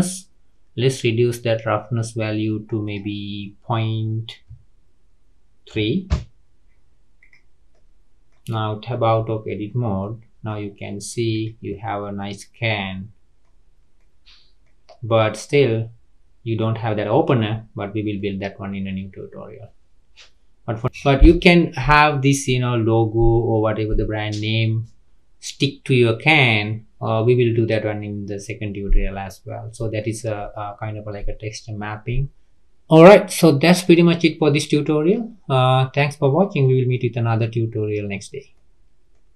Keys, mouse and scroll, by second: 2.8-6.0 drag, 7.2 click, 7.7-8.9 middle drag, 8.9 Tab, 9.5-10.0 scroll up 3, 10.0 middle click, 10.6 scroll down 3, 11.0-11.3 middle drag, 11.3 click, 11.7-12.4 middle drag, 12.4 scroll up 2, 12.8-13.6 middle drag, 13.6-14.0 scroll up 3, 14.0 middle click, 14.8-15.2 scroll down 4, 15.2-16.6 middle drag, 16.6-17.7 scroll up 1, 17.7-18.2 scroll down 2, 18.2-20.9 middle drag, 20.9-24.1 scroll up 3, 24.8-27.9 scroll down 3, 30.0-38.2 middle drag, 38.7-39.3 middle drag, 39.3 scroll up 1.